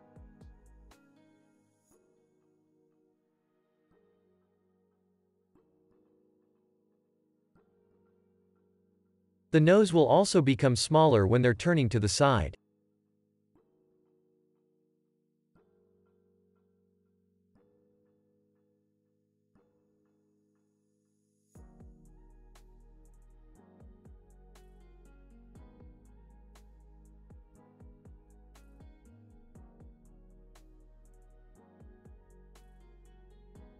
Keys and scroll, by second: 5.9-7.9 typing, 19.8 space, 26.3 space, 28.0 Right, 29.7 Left.